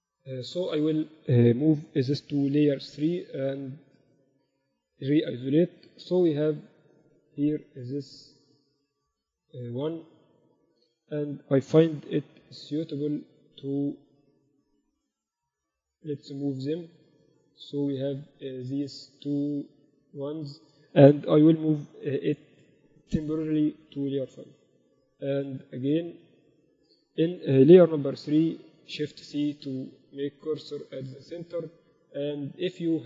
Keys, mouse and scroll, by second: 1.0 Tab, 1.8 m, 4.6 KP_Divide, 6.1 KP_8, 6.3 KP_8, 6.5 KP_6, 6.7 KP_6, 8.9 z, 9.9 z, 10.1-11.7 middle drag, 11.7 m, 13.3-15.0 drag, 13.7 a, 13.9 a, 15.0 middle click, 15.0 a, 15.6-17.3 right drag, 16.4-18.1 drag, 16.4 middle click, 17.5 z, 18.4 middle click, 19.1-21.0 drag, 20.1-24.7 right drag, 21.5 m, 23.5-24.7 drag, 23.5-24.7 middle drag, 26.1-27.9 drag, 26.9 KP_1, 28.1 shift+c.